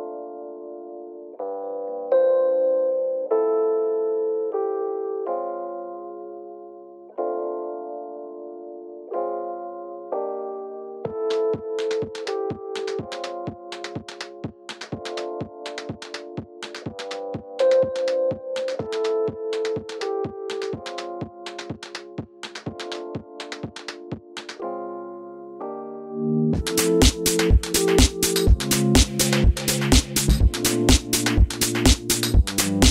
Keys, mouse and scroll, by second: 16.4 click, 17.1-18.4 middle drag, 17.8 r, 18.4 g, 18.8 click, 20.1 middle click, 20.1 g, 20.3 click, 20.8-22.7 middle drag, 20.9 g, 22.2 g, 22.7 click, 22.7-24.5 middle drag, 24.5 scroll down 1, 24.8 click, 25.0 middle click, 27.7 click, 29.1 middle click, 29.7 alt+d, 31.6 click, 32.3 alt+d.